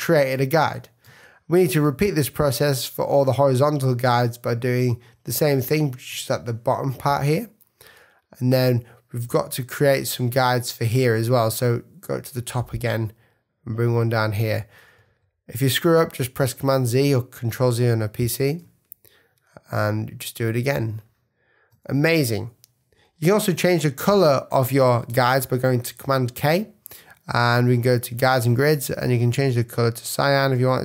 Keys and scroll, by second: 0.6 super+z, 1.0 super+space, 6.1 space, 15.0 super+z, 18.6 space, 22.2 super+-, 26.2 super+k.